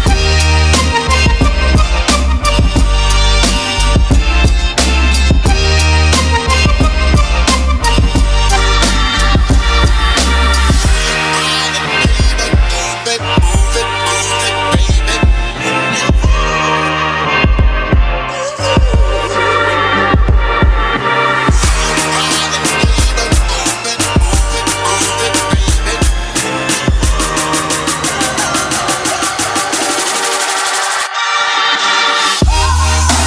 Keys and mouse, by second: 1.0 KP_0, 2.7 click, 3.0 ctrl+middle click, 4.5-5.8 drag, 5.5 KP_0, 6.7 middle click, 8.5 ctrl+middle click, 8.9 middle click, 10.1 ctrl+middle click, 10.5 middle click, 18.0 click, 19.5 click, 23.7 click, 25.7 click, 27.2 middle click, 27.9 click, 28.7 middle click, 29.8 ctrl+middle click.